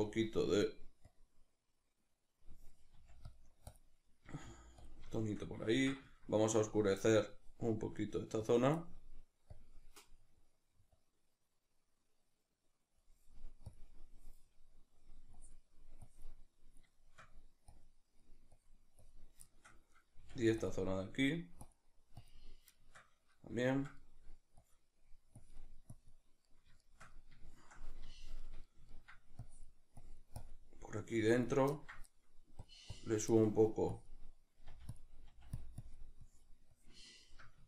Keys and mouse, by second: 3.0 click, 3.0 f, 4.3 f, 4.9 click, 5.2-10.9 shift+middle drag, 10.9 click, 16.9 shift+middle click, 17.8 click, 18.2 middle click, 18.6 click, 19.5-20.7 shift+middle drag, 20.2 f, 20.7 click, 21.3 middle click, 21.6-22.8 drag, 22.8-24.6 shift+middle drag, 24.6-26.4 drag, 26.4-29.4 middle drag, 29.4-31.8 drag, 31.8-33.9 ctrl+middle drag, 33.9-35.0 drag, 34.7 f, 35.3 f, 35.6 click, 37.2-37.6 shift+middle drag.